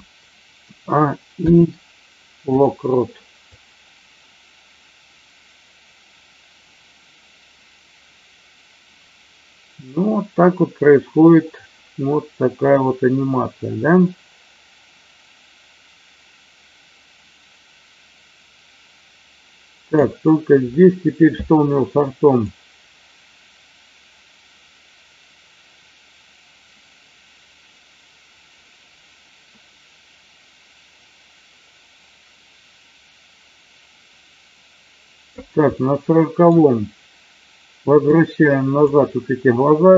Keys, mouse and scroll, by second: 0.6 a, 1.3 i, 3.5-20.1 drag, 22.4-35.4 drag, 35.7-36.4 middle drag, 38.1-38.9 drag.